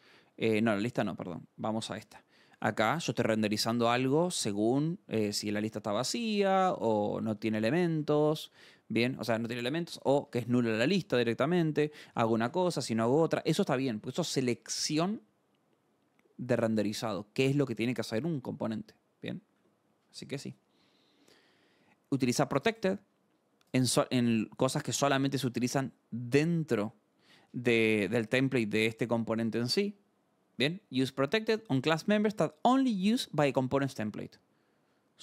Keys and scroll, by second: 1.6-7.1 typing, 1.9 Return, 7.9 Escape, 8.3 h, 10.0-13.2 typing, 19.5 alt+Tab, 20.3 Escape, 21.3 scroll.